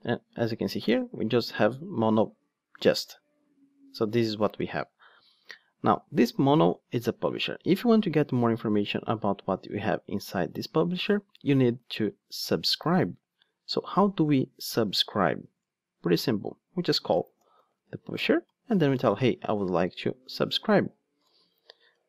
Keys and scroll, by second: 15.1 Tab, 18.1 Return.